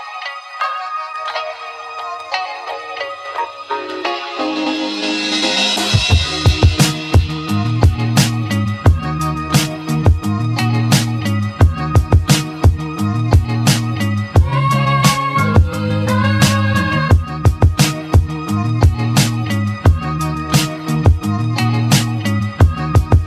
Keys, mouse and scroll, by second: 0.7-3.2 drag, 4.3-6.8 drag, 7.5-10.0 drag, 10.8 click, 11.9 `, 13.0-14.0 shift+middle drag, 14.0-14.6 scroll down 2, 14.6 scroll down 1, 14.9 a, 17.1 click, 18.0 click, 18.6 l, 19.8 p, 20.6 Tab, 21.0 click, 22.4 r.